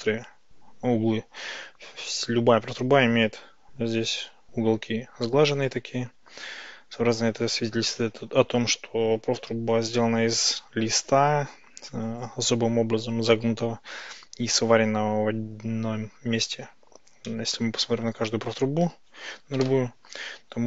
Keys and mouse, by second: 17.4-18.2 drag, 17.4-18.2 middle drag, 19.6 KP_Decimal.